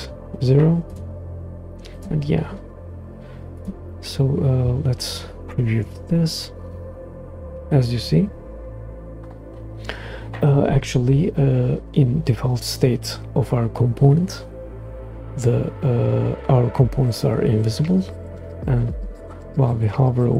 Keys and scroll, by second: 5.8 super+Return.